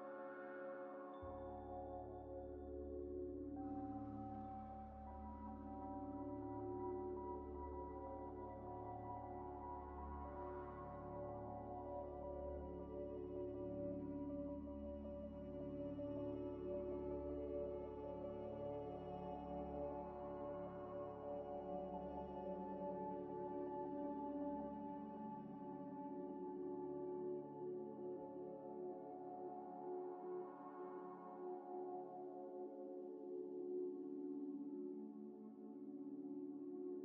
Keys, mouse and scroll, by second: 0.7 scroll down 1, 1.1 s, 2.8 Tab, 3.4 s, 3.5 z, 5.6 Tab, 6.5 1, 7.1 z, 7.5 z, 8.4 1, 9.4 Tab, 9.7 1, 10.5 g, 10.6 y, 12.0 y, 12.0 scroll up 1, 12.7 g, 14.4 Tab, 14.7 ctrl+a, 15.5 Tab, 15.8 ctrl+a, 16.0 Tab, 16.3 ctrl+a, 17.0 Tab, 17.4 1, 18.0 ctrl+b, 19.4 scroll up 1, 20.7 double click, 21.6 double click, 21.8 double click, 21.8 ctrl+b, 24.0 Tab, 24.3 middle click, 24.7 Tab, 25.2 middle click, 25.5 z, 26.0 s, 26.1 x, 26.8 ctrl+z, 27.1 Tab, 27.3 s, 27.5 x, 29.7 z, 30.4 scroll up 1, 30.6 scroll down 1, 32.2 shift+a, 33.6 ctrl+z, 34.0 shift+a, 36.7 scroll down 1.